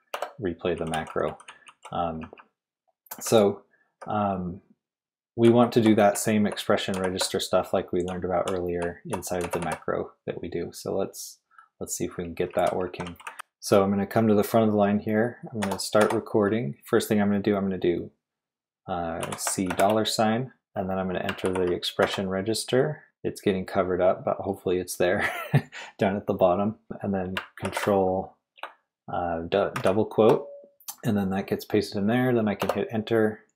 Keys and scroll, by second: 0.1 Return, 0.5-4.1 typing, 5.2-10.1 typing, 12.0-13.8 typing, 15.6-16.0 typing, 19.2 c, 19.7 shift+4, 21.4 ctrl+r, 22.0 =, 27.6 ctrl+r, 29.7 shift+', 32.6 Return.